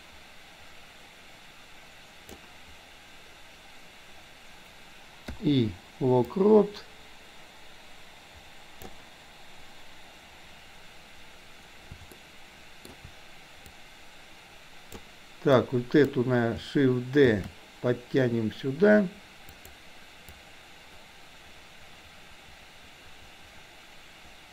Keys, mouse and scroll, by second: 6.4-9.1 drag, 12.1 shift+middle click, 13.8-15.1 drag, 15.6 click, 20.4-24.5 drag.